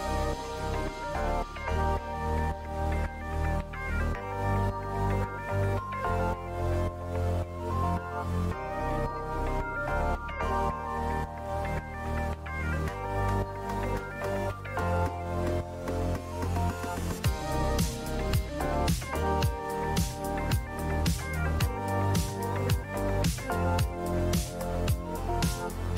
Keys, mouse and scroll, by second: 0.3 click, 2.1 click, 4.6 click, 4.9 click, 7.5-8.5 drag, 9.7 click, 11.4 click, 12.5-14.6 drag, 16.1-17.5 drag, 17.7 Down, 17.9 Down, 17.9 Down, 18.1 Down, 18.5 Right, 18.6 Right, 18.7 Right, 18.8 Right, 19.1 Right, 19.6 Down, 19.7 Down, 20.0 Down, 20.3 Left, 21.0 Left, 22.3 Down, 24.1 Right, 24.4 Right.